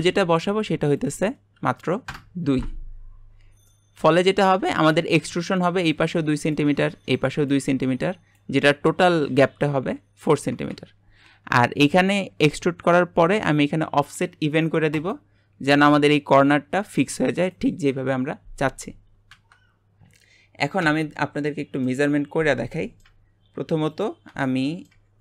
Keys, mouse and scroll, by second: 1.1-3.7 drag, 3.7-10.8 middle drag, 15.1 click, 20.0-20.8 scroll down 2, 20.8 Tab, 21.5-23.9 middle drag, 23.9 click, 24.6 shift+middle click.